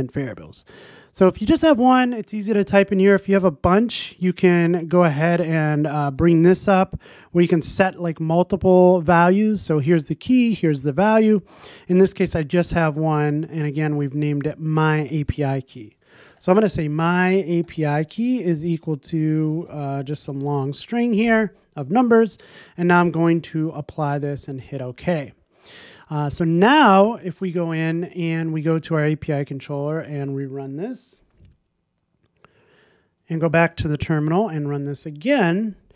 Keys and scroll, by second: 27.4 super+s, 30.1 ctrl+r.